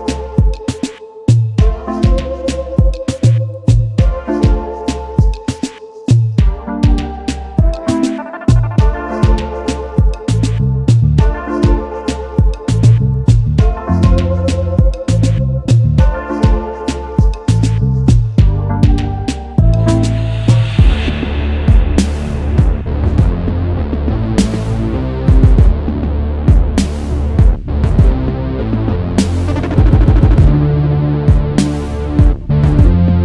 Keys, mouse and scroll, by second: 6.4 double click, 6.6 ctrl+z, 9.2 alt+scroll down 1, 10.1-12.7 scroll up 1, 14.0 double click, 21.9 ctrl+z, 24.0 alt+click, 26.0 alt+click, 30.5 alt+click.